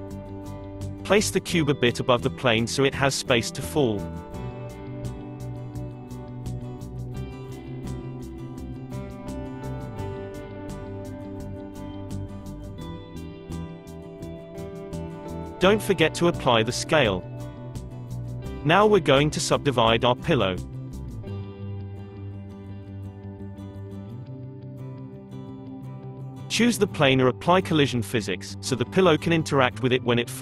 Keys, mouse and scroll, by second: 1.8 s, 3.0-4.1 middle drag, 4.1-5.0 drag, 5.0-8.4 shift+middle drag, 8.4-9.6 drag, 11.1-12.9 drag, 13.4-16.1 drag, 15.9 ctrl+a, 16.9 Tab, 18.2-20.4 right drag, 20.4 click, 21.9 click, 22.4 click, 22.7 click, 23.9 click, 24.7 Tab, 26.3 click, 27.9 click.